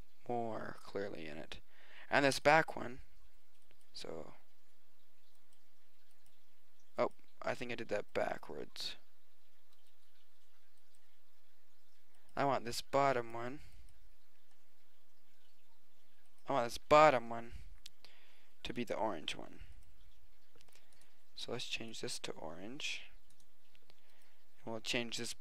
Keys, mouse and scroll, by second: 7.1-10.2 drag, 12.3-15.3 drag, 16.6 right click, 17.9 middle click, 18.2 middle click, 19.2 middle click, 24.5-25.4 drag.